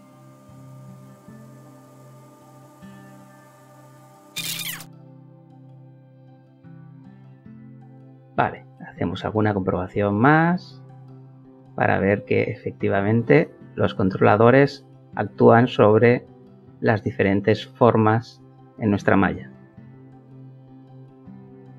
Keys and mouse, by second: 0.0 middle click, 0.2 click, 1.1 click, 1.8 click, 2.3 click, 2.8 Return, 3.4 ctrl+l, 6.5 click, 7.6 click, 8.9 click, 9.9 g, 11.4 Escape, 12.3 click, 13.0 g, 14.4 Escape, 15.1 click, 15.9 g, 17.1 Escape, 18.1 click, 18.9 g, 20.3 Escape.